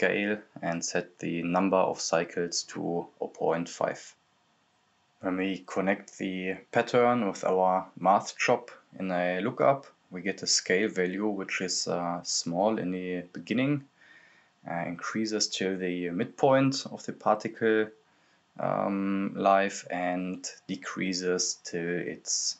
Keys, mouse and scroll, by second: 0.5 click, 0.7-1.7 typing, 2.1 click, 3.0-7.0 drag, 7.0 click, 9.2-10.3 typing, 11.7-17.6 drag, 19.9 click, 20.3-20.6 scroll down 1, 20.6 click, 22.0 right click.